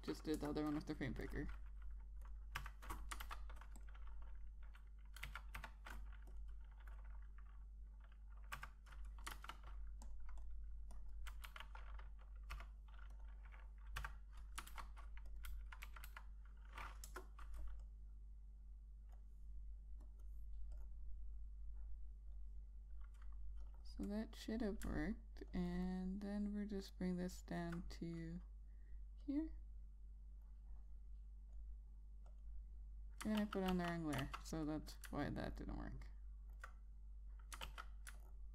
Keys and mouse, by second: 0.5 5, 1.0 Return, 2.0 click, 3.3 F6, 3.9 ctrl+a, 4.5 click, 5.9 1, 7.0 click, 10.5 ctrl+a, 10.8 click, 11.1 double click, 11.6 click, 12.2 2, 13.8 click, 14.7 F6, 15.4 ctrl+a, 16.0 click, 16.2 1, 17.8 Return, 18.6 click, 29.9 click, 34.1 ctrl+z, 34.4 ctrl+z, 34.9 ctrl+z, 36.2 alt+click, 38.4 ctrl+z.